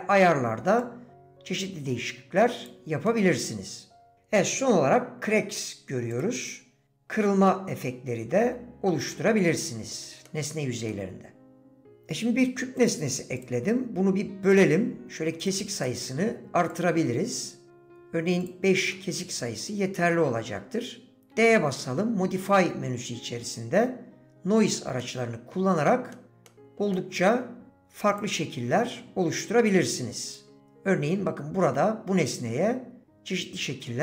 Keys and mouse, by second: 1.3-2.9 drag, 3.1-4.1 middle drag, 6.8 middle click, 7.5-8.9 middle drag, 9.1 middle click, 10.2 middle click, 10.9-11.9 middle drag, 16.7 click, 18.9 click, 25.0 middle click, 26.2 middle click, 26.5 middle click, 26.9 middle click, 30.5-34.0 drag.